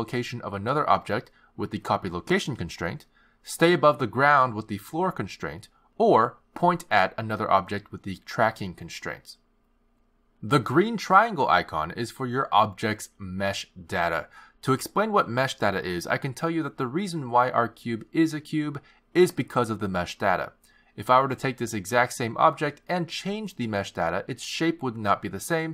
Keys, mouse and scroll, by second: 0.3 click, 1.1 click, 2.0 click, 6.0 click, 7.1 click, 7.6 click, 9.4 click, 11.2 click, 16.8 shift+a, 20.0 g, 21.9 click, 23.3 click.